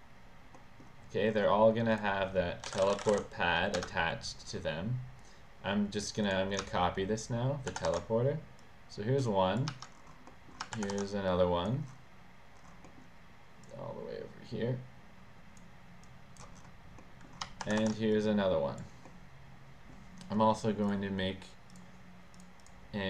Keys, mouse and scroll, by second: 0.8 scroll down 2, 2.1 click, 2.7-3.8 typing, 3.9 Return, 6.4 click, 8.1 ctrl+v, 8.8-9.7 drag, 10.5 middle click, 10.5 scroll, 10.9 ctrl+c, 11.4-11.8 drag, 13.0 middle click, 13.0 scroll, 13.8-15.7 drag, 16.2-16.5 drag, 17.2 middle click, 17.2 scroll up 1, 17.8 ctrl+c, 18.2-18.9 drag, 19.3 middle click, 19.3-20.0 scroll up 1, 21.0 click, 21.8 click, 22.5 click, 22.7 click.